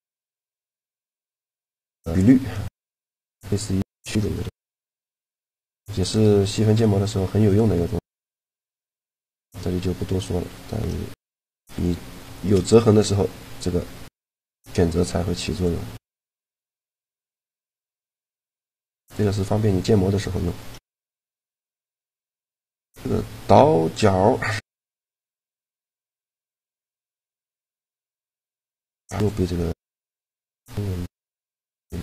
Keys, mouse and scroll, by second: 1.1-2.2 drag, 1.9 e, 2.7 click, 4.1 ctrl+z, 4.9 Tab, 8.1 Tab, 9.9 a, 11.7 shift+g, 15.3-16.6 right drag, 15.8 shift+g, 17.9 a, 20.8 shift+g, 25.1-27.3 right drag, 25.9 shift+g, 26.9 shift+g, 29.7 shift+g.